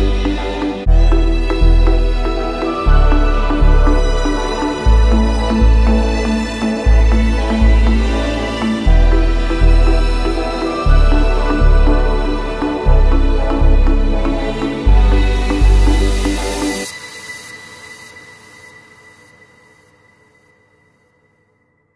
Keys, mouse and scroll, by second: 3.0 click, 4.4 click, 7.8 shift+click, 9.5 click, 9.7-12.5 scroll up 48, 12.5 Return, 13.5 click, 13.7-15.1 scroll down 10, 15.1 Return, 16.0 click, 16.2-17.6 middle drag, 16.2-17.6 scroll down 10, 17.6 scroll down 1, 17.6 Return, 19.2 click, 20.2 click, 21.5 click.